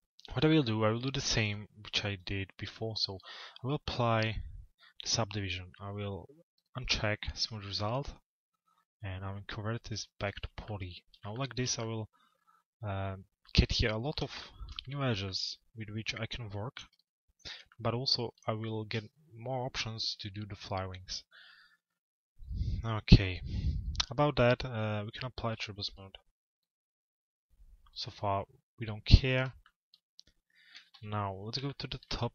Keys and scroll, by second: 30.3 t.